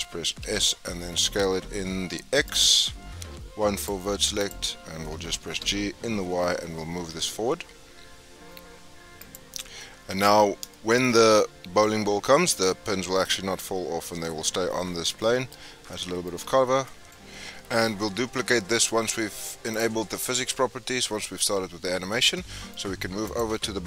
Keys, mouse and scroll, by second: 0.2 s, 3.2 1, 3.7 click, 4.3 shift+click, 5.3 g, 9.7 scroll down 1, 9.8-13.7 middle drag, 15.2 shift+middle click, 15.5-15.9 scroll up 3, 15.9 middle click, 16.4 Tab, 17.6 scroll down 4, 19.7 click, 20.2-21.8 scroll up 6, 21.8 scroll down 6, 22.3 shift+middle click, 22.7 scroll up 4, 23.2 click.